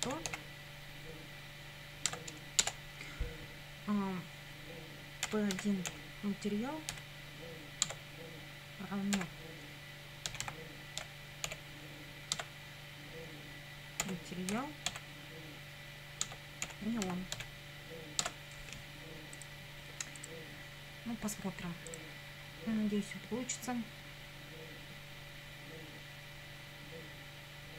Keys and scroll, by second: 0.0-0.8 typing, 2.1 Tab, 2.6 Return, 5.0-6.9 typing, 7.9 Tab, 9.1-11.5 typing, 12.3 Tab, 14.0 ., 14.5 m, 14.9 a, 16.3 Tab, 16.4-17.9 typing, 18.2 Tab.